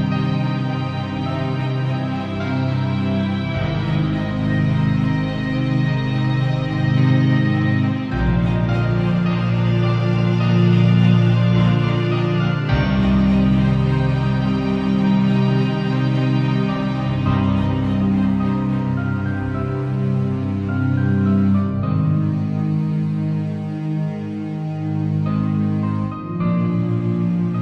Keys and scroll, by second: 0.3 ], 2.5 [, 7.9 space, 8.9 v, 10.7 ctrl+Tab, 15.3 super+t, 17.0 Return, 17.7 alt+Return, 19.2 alt+super+t, 19.7 super+t, 23.5 alt+shift+Return, 24.0 Return, 24.7 shift+Up, 26.2 m.